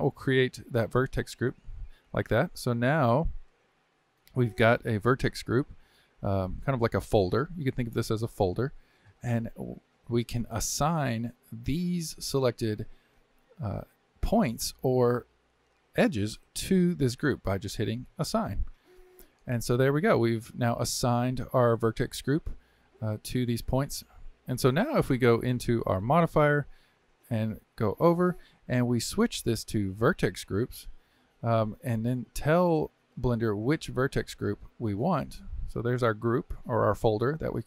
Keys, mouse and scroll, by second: 1.0-4.0 drag, 4.8-7.8 middle drag, 18.1-20.0 drag, 20.0-24.4 middle drag, 25.8 click, 26.7 Tab, 28.9-31.9 drag, 35.1-37.6 drag.